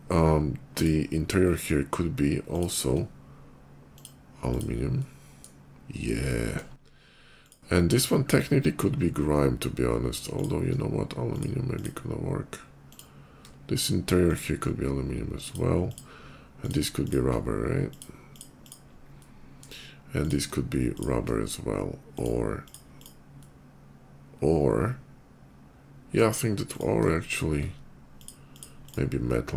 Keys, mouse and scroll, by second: 0.6 click, 1.2 middle click, 2.3 shift+click, 3.8 click, 4.3 click, 4.8 middle click, 6.1 shift+middle click, 7.2 shift+click, 7.7 shift+click, 10.2 shift+click, 11.1 shift+click, 11.5 shift+click, 12.7 shift+click, 14.1 shift+click, 15.3 shift+click, 15.5 shift+click, 16.4 shift+click, 16.8 shift+click, 17.7 shift+click, 18.2 shift+click, 18.4 shift+click, 19.0 shift+middle click, 20.0 click, 20.8 shift+click, 22.0 shift+click, 22.3 shift+click, 22.8 shift+click, 23.2-26.0 shift+middle drag, 26.6 click, 27.1 shift+click, 28.0 shift+click, 28.2 shift+click, 28.7 shift+click, 29.1 shift+middle click.